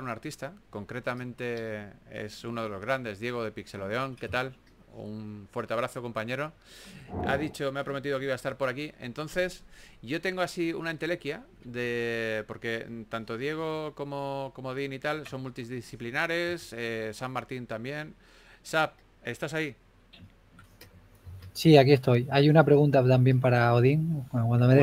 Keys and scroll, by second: 4.5 4, 9.0 typing, 12.4 typing, 14.6 typing, 16.0 super+z, 17.5 typing, 22.6 typing, 23.7 typing.